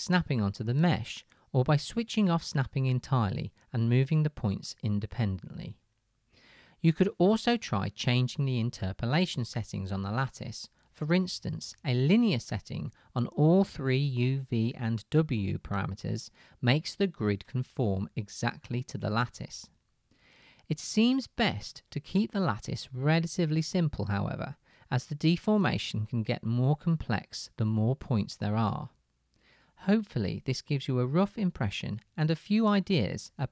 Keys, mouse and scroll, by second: 20.7-30.7 middle drag, 20.7 right click, 21.2 click, 21.2 right click.